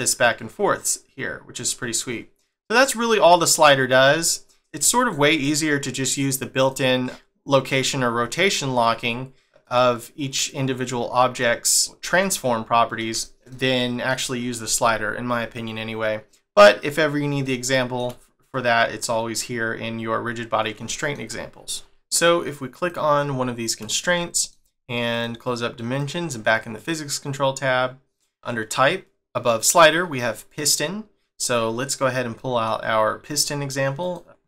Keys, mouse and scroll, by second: 4.6 middle click, 4.8 shift+scroll up 1, 4.9 shift+middle click, 6.0 click, 6.6 click, 8.4 scroll down 1, 9.6 click, 10.3 click, 10.9 scroll up 1, 11.4 middle click, 11.9 click, 12.1 middle click, 17.4 shift+middle click, 20.8 shift+middle click, 22.8 click, 23.6-24.2 scroll up 1, 24.2 shift+middle click, 25.1 click, 26.0 click, 28.4 click, 32.1 scroll down 1, 32.4 shift+middle click, 34.1 click.